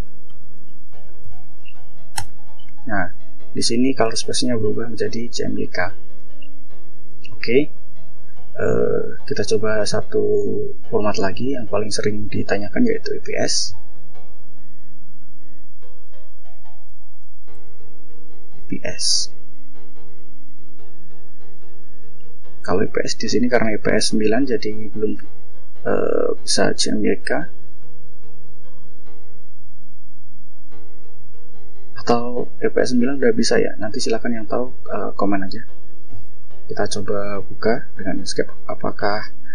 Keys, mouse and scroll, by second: 0.1 BackSpace, 1.0 Up, 1.9 Return, 3.6 click, 6.4 click, 9.6 click, 10.6 click, 12.5 click, 15.2 click, 16.6 BackSpace, 18.1 ctrl+e, 18.4 s, 21.7 click, 22.8 click, 34.9 click, 36.2 click, 36.6 right click, 37.4 click.